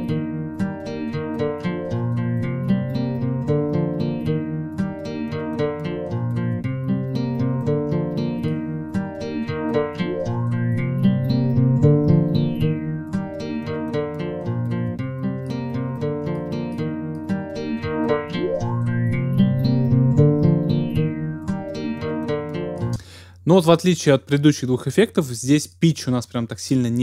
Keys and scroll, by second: 22.9 space.